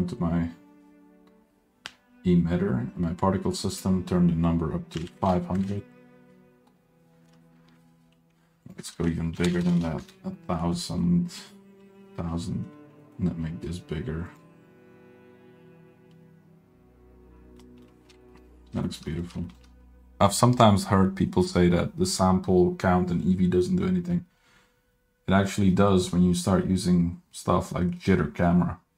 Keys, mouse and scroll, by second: 3.7-5.9 drag, 5.2 KP_0, 8.6-10.3 drag, 9.5 KP_0, 9.7 KP_0, 11.1 scroll down 1, 11.2-11.5 middle drag, 11.8 KP_Decimal, 12.3 scroll down 2, 12.4 middle drag, 12.7 scroll up 1, 13.0 middle click, 13.5 s, 17.6 middle drag, 18.1 scroll down 2, 18.2 shift+middle click, 18.4 middle drag, 18.6 scroll up 2, 18.8 shift+middle drag, 19.1 middle drag, 19.3 scroll up 1, 19.5 shift+middle drag.